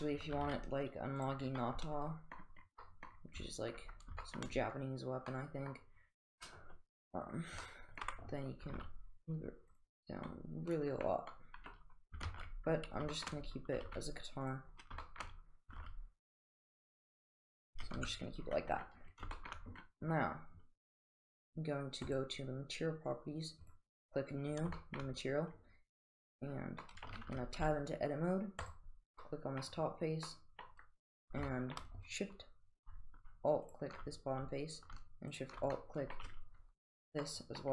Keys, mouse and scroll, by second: 0.4 g, 1.6-2.4 middle drag, 2.8-3.2 middle drag, 4.2 shift+middle drag, 5.3-5.7 middle drag, 7.6-8.0 middle drag, 8.0 middle click, 8.7 g, 10.3-11.1 middle drag, 11.4-11.9 middle drag, 12.3 ctrl+z, 13.2 shift+middle drag, 13.8 g, 15.0 shift+middle drag, 15.7 g, 17.0 g, 18.4 Tab, 19.4 shift+middle drag, 22.2 click, 23.7 click, 24.8 shift+middle drag, 26.8 middle drag, 27.3 Tab, 28.7 click, 29.2-29.6 middle drag, 30.3-30.7 middle drag, 31.5 shift+middle click, 33.7 alt+shift+click, 35.3 alt+shift+click, 35.8-36.2 middle drag, 37.2-37.7 middle drag.